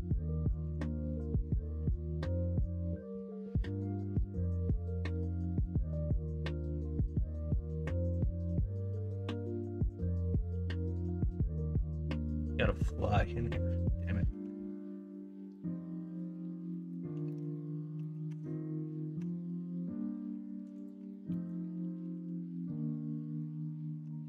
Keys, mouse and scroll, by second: 0.6 h, 1.6 middle click, 2.1-4.3 middle drag, 4.5 shift+middle drag, 5.3 middle drag, 7.4-10.5 middle drag, 16.6 middle drag, 17.2 middle drag, 17.9 middle click, 18.2 Tab, 19.1 Tab, 21.2 middle drag, 22.1 alt+z.